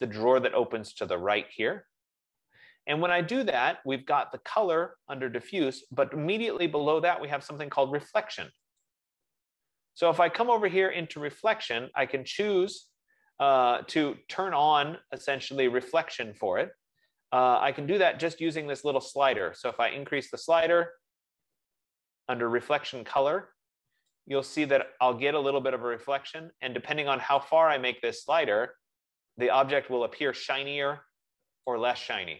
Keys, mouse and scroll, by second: 1.5 F15, 8.9-14.2 drag, 20.0 click, 27.6 click, 31.9 click.